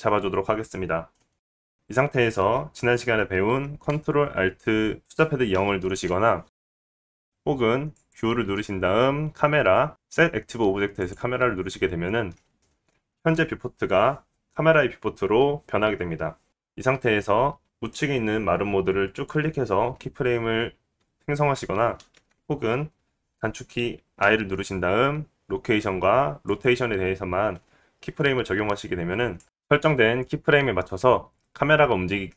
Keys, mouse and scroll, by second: 1.7 middle click, 6.6 ctrl+alt+KP_0, 8.5 click, 19.1 click, 23.2 ctrl+z, 25.4 i, 29.0 click, 29.7 click, 32.0 space.